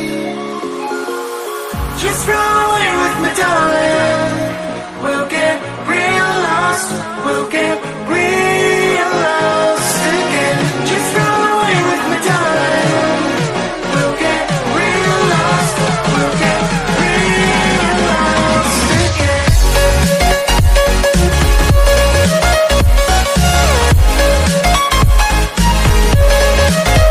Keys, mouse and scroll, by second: 2.8 KP_Divide, 4.0 click, 5.4 click, 6.4-7.0 scroll up 2, 7.3-9.2 drag, 9.4 KP_Divide, 10.0 KP_Divide, 10.2 KP_7, 10.7 KP_9, 11.2-11.7 scroll down 1, 11.7-12.4 scroll up 4, 13.0 click, 14.7 click, 16.9 click, 17.4-19.1 drag, 19.1 scroll down 1, 20.2-22.1 drag, 23.2-23.8 scroll up 2, 24.7 KP_Divide, 25.2 KP_7, 26.2 click, 26.5-27.1 scroll up 1.